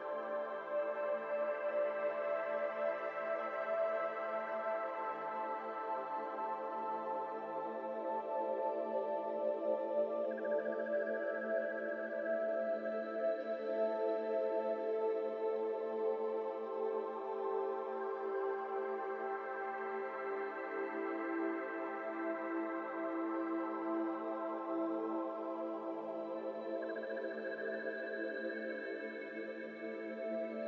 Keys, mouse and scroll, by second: 0.5 alt+click, 0.9 ctrl+b, 3.5 3, 4.0 click, 4.2 1, 4.4 click, 4.9 shift+click, 5.4 shift+click, 5.6 shift+click, 5.9 s, 7.0 click, 7.8 click, 9.1 ctrl+click, 9.6 middle click, 9.7 scroll up 2, 10.0 e, 11.1 middle click, 11.9 scroll down 3, 11.9 Tab, 12.2 middle click, 12.7 scroll down 1, 12.9 Tab, 13.1 middle click, 13.3-13.6 scroll up 4, 13.6 middle click, 14.3 1, 14.8 middle click, 15.1 alt+z, 15.2 click, 15.7 middle click, 16.1 shift+click, 16.7 s, 17.9 alt+z, 18.1 middle click, 18.5 ctrl+r, 19.6 ctrl+r, 20.1 alt+z, 20.5 click, 20.8 click, 21.5 middle click, 22.1 shift+click, 22.7 alt+z, 22.8 s, 23.7 z, 23.7 z, 23.8 z, 24.1 Tab, 24.2-24.5 middle drag, 24.5 Tab, 24.7 middle click, 24.8 scroll up 1, 25.0 3, 25.1 click, 25.5 shift+click, 25.8 Tab, 26.0-26.3 scroll down 6, 26.3-26.7 middle drag, 26.7 click, 26.9 Tab, 26.9 middle click, 27.5 scroll up 1, 27.6 middle click, 28.3 Tab, 28.5 scroll down 2, 28.6-29.0 middle drag, 29.0 click, 29.2-29.7 middle drag, 29.7 click, 30.3 click.